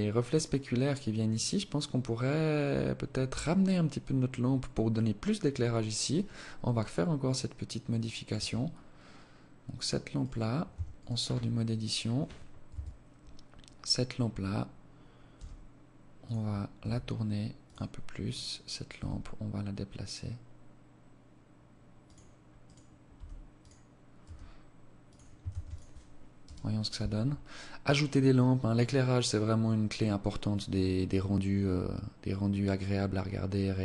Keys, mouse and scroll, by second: 7.2 Escape, 7.6-8.7 scroll down 6, 9.0 right click, 9.6 Tab, 9.8 right click, 11.6 KP_7, 12.8-13.1 scroll down 1, 14.2 g, 15.6 r, 17.2 right click, 17.8 g, 21.5 right click, 22.0 g, 23.0 r, 24.3 ctrl+s.